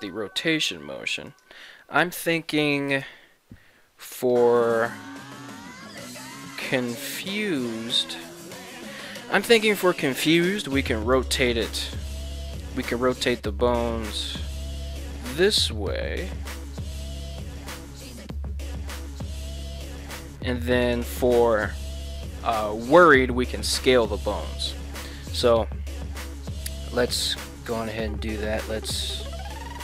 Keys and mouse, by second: 1.1 ctrl+Tab, 1.3 right click, 11.8 r, 12.2 right drag, 12.7 right click, 13.2 right click, 13.7 right click, 14.1 ctrl+Tab, 14.4 right drag, 15.0 r, 28.4 ctrl+Tab, 28.9 right click.